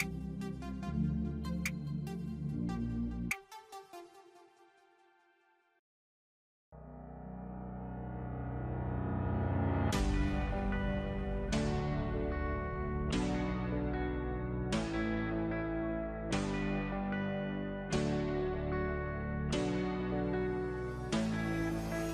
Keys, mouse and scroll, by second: 15.0 click.